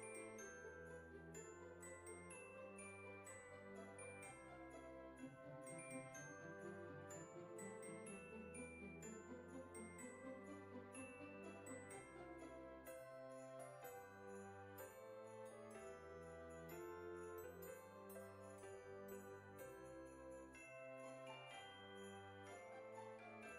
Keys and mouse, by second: 0.5 KP_5, 0.7 KP_0, 2.1 click, 3.3 click, 4.7 F6, 9.2 click, 11.3 g, 13.5 click, 14.2 KP_3, 15.1 r, 15.4 KP_Subtract, 15.6 KP_9, 16.9 KP_0, 18.5 g, 20.8 click, 21.1 KP_1, 22.1 s.